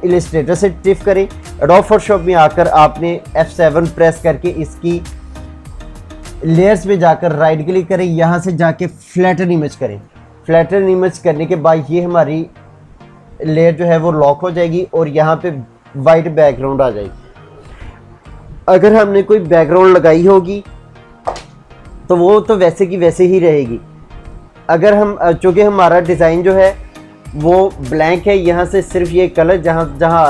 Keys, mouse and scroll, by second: 7.2 right click, 9.5 click, 27.1 ctrl+z.